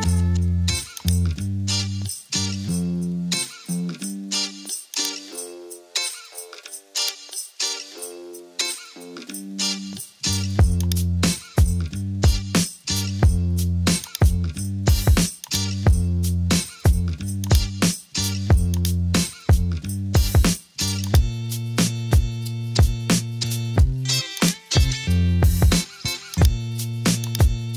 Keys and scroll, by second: 3.0 super+m, 12.6 super+m.